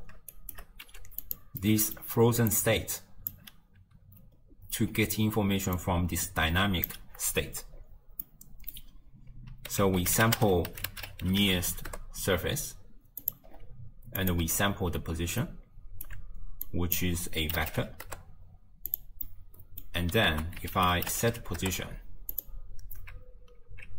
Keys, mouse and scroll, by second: 0.4 shift+right click, 0.9 g, 1.7 middle click, 2.3 d, 2.5-3.4 drag, 3.4 d, 5.2 d, 5.4 d, 5.8-6.9 drag, 6.9 d, 7.8-8.3 scroll up 1, 8.3-9.8 middle drag, 9.8 ctrl+a, 13.6-14.2 scroll up 2, 14.2-15.5 drag, 15.5-16.7 alt+right drag, 16.7 click, 19.3-20.4 middle drag, 20.4 ctrl+a.